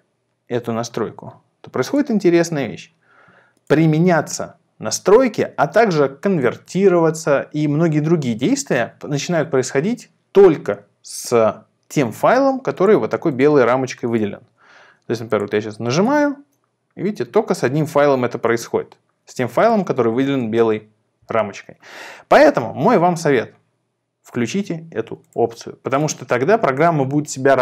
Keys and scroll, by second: 15.9 shift+super+v, 18.5 shift+super+v, 20.4 shift+super+v.